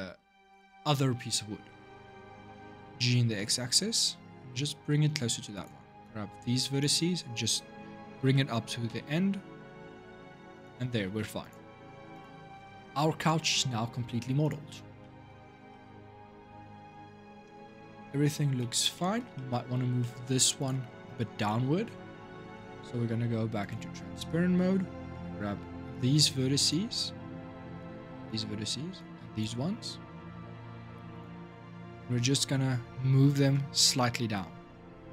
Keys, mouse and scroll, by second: 0.2-1.1 scroll down 9, 1.1-2.5 scroll up 4, 2.5 g, 5.8 click, 8.0 g, 10.8 Tab, 11.2 click, 11.5 scroll down 6, 11.9 click, 12.3-14.2 middle drag, 14.2 click, 14.8-18.0 shift+middle drag, 18.0-18.4 scroll up 4, 18.4-19.5 shift+middle drag, 19.5-19.8 scroll up 3, 19.8 middle click, 20.4 click, 20.9 Tab, 21.3-23.4 middle drag, 23.4-24.0 drag, 24.0-25.7 middle drag, 25.7 click, 27.6 shift+click, 28.7 shift+click, 31.4-34.5 scroll up 4, 34.9 g.